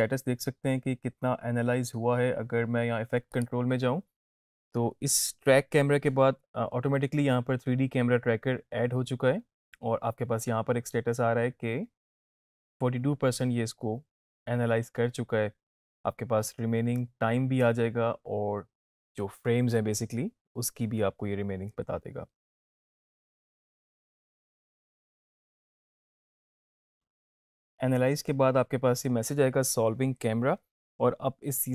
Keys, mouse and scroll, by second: 3.4 click.